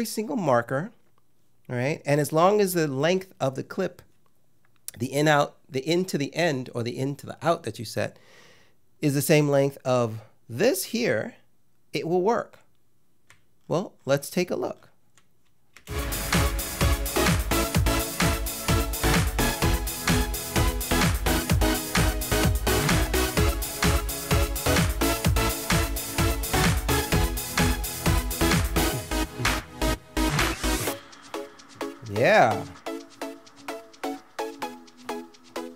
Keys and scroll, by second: 15.8 ctrl+space.